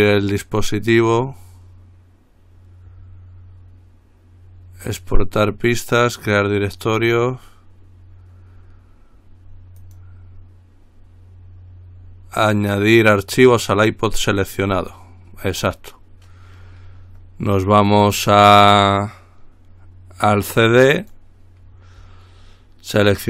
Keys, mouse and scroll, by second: 10.0 click, 14.5 click, 20.9 click.